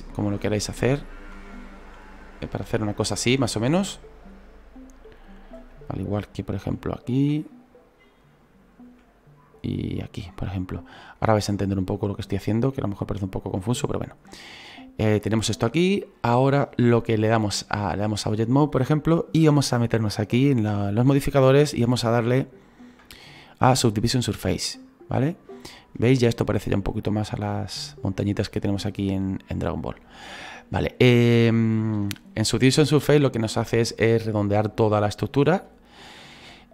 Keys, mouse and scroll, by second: 0.3 shift+middle click, 1.1 shift+right click, 1.8 e, 2.8 middle click, 3.3-3.6 scroll down 1, 3.6 middle click, 4.3-5.0 scroll up 3, 5.0 scroll up 1, 5.0-6.1 right drag, 6.6 e, 7.5 middle click, 8.3 right click, 8.8 e, 10.4 scroll down 3, 11.2 right click, 11.9 middle click, 12.3-12.7 scroll up 2, 12.7 e, 13.7 middle click, 14.2-14.6 scroll down 1, 14.6-15.8 middle drag, 15.8 scroll down 3, 16.2 scroll up 1, 18.1-25.6 drag, 25.6 scroll up 2, 26.3-29.6 scroll down 2, 29.6-30.3 scroll up 1, 30.3-31.9 middle drag, 31.9 scroll up 2, 33.3-36.5 scroll down 1.